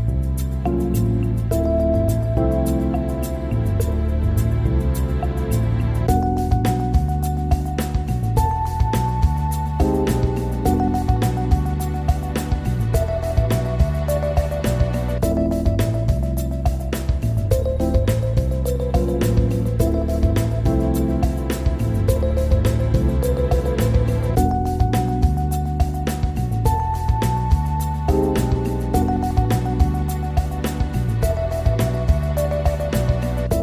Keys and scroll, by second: 28.4 ctrl+g, 31.4 ctrl+r.